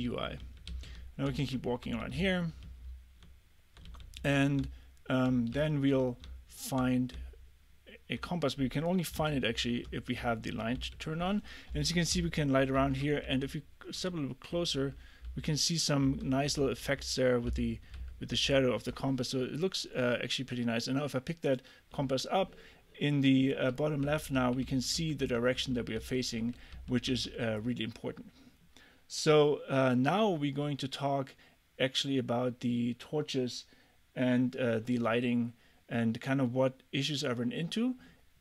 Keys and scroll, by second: 0.0-4.2 typing, 5.6 a, 6.3 w, 9.2 t, 9.8 f, 10.8 d, 12.2-18.9 typing, 24.1 a, 24.6 a, 25.6 a, 27.2 a.